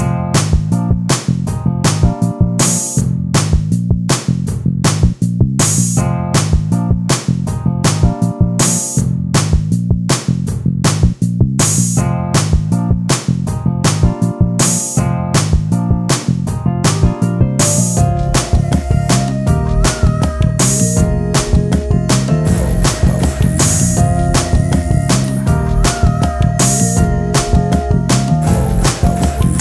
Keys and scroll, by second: 0.1 ctrl+space, 3.6 t.